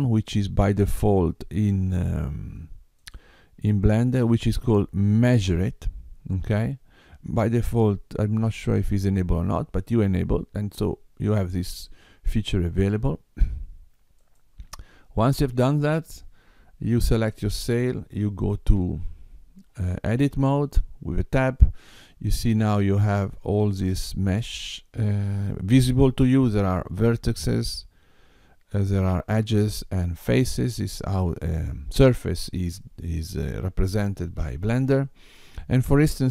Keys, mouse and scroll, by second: 15.5 click, 18.8 Tab, 23.6 middle click.